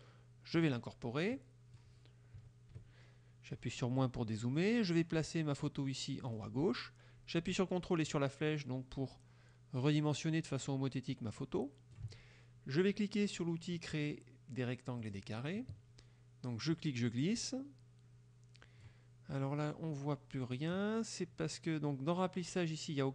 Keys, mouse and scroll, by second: 0.7 click, 1.4-2.0 drag, 2.5 KP_Subtract, 4.1-6.6 drag, 8.1-12.2 ctrl+drag, 15.0 click, 16.8-19.1 drag.